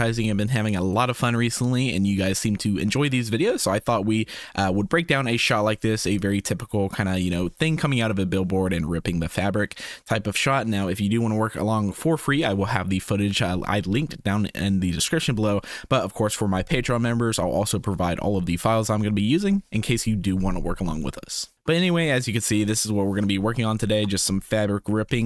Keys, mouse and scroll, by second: 4.3 space, 21.5 space, 23.9 space.